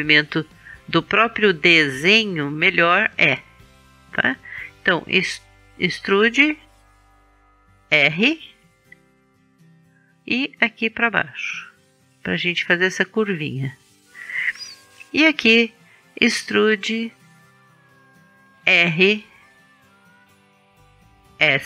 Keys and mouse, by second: 0.8-4.3 middle drag, 5.1 e, 8.4 r, 10.6-13.6 drag, 16.0 e, 18.6 click, 19.0 r, 21.3-21.6 drag.